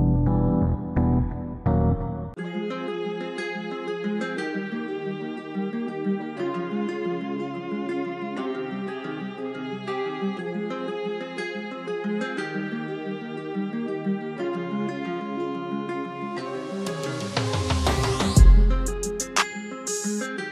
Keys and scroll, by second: 15.4 F4.